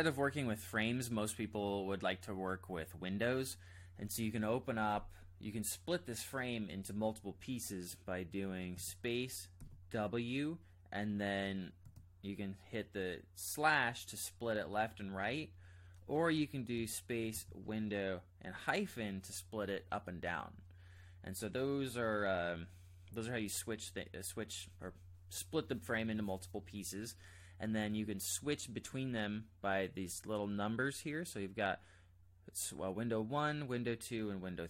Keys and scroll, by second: 8.7 space, 9.6 w, 11.8 /, 16.7 space, 17.5 w, 18.4 -.